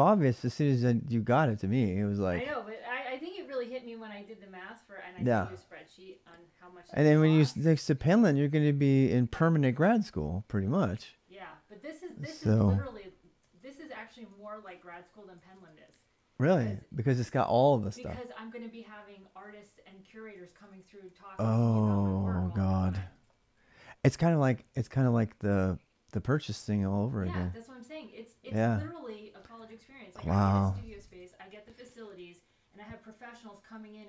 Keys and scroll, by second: 12.0-16.3 typing, 13.2 ctrl+[, 20.2 ctrl+[, 20.4-21.6 typing, 20.6 Return, 22.6 ctrl+[, 22.7-23.5 typing, 30.6-34.0 typing, 31.7 ctrl+[, 31.7 ctrl+j.